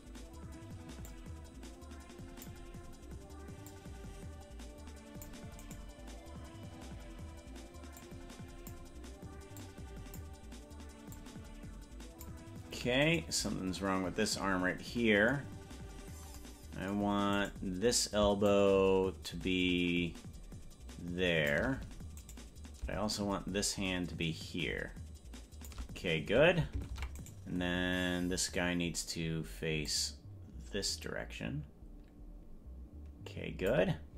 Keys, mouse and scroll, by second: 1.1-2.6 drag, 3.7-5.4 drag, 5.9 right click, 8.0 click, 9.6 click, 11.2-12.4 drag, 13.3 right click, 17.7 right click, 18.5-21.7 shift+drag, 22.5 right click, 23.2-25.9 shift+drag, 27.1 ctrl+Tab, 27.5 right click, 29.9-33.9 drag.